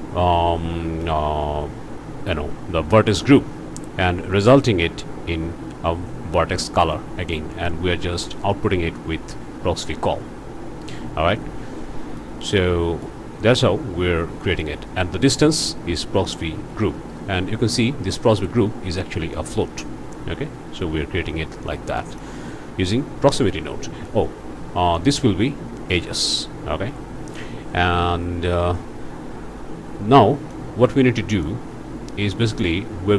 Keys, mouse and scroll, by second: 9.8-10.1 scroll up 1, 11.6-11.9 scroll down 1, 12.2-13.2 drag, 14.4 click, 14.8 scroll up 1, 21.6 click, 25.0 click, 26.1 click, 30.5-31.6 drag, 32.3 click.